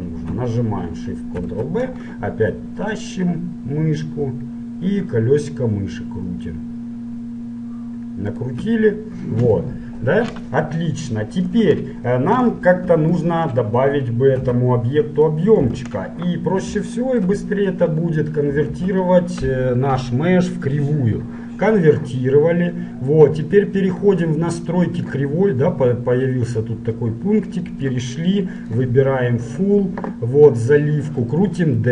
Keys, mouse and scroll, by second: 1.4 ctrl+shift+b, 9.8-11.6 middle drag, 11.7 KP_Decimal, 12.9 KP_Decimal, 13.4-15.4 middle drag, 14.5 Tab, 15.7 KP_Decimal, 17.1-20.8 middle drag, 18.8 alt+c, 23.2-25.2 drag, 27.2-30.6 drag, 31.4-31.9 drag.